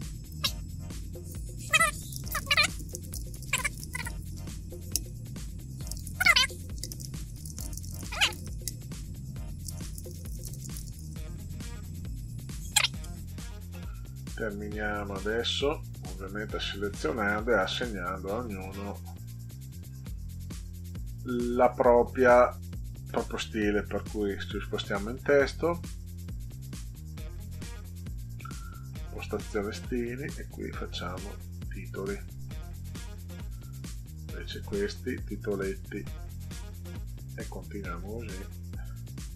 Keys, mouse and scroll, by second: 2.4-4.7 typing, 6.1-10.9 typing, 15.3 click, 15.6 click, 16.3 click, 20.6 click, 22.7-23.2 drag, 24.2 click, 28.5 click, 29.6 click, 32.1 click, 33.6-34.7 drag, 35.6 click, 36.7 click, 38.0 click.